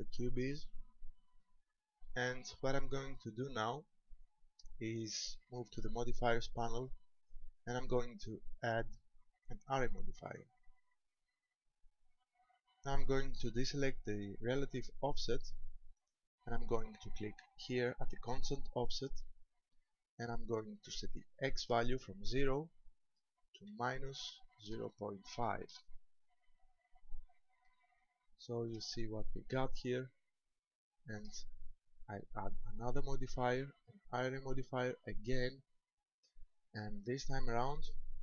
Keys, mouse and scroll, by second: 1.1 shift+middle click, 2.7-3.1 scroll up 2, 3.5-5.0 scroll up 1, 6.7 click, 8.5 click, 15.4 click, 19.1 click, 22.3 click, 28.1 shift+middle click, 29.1-29.7 scroll up 3, 30.7 shift+middle click, 32.9 click.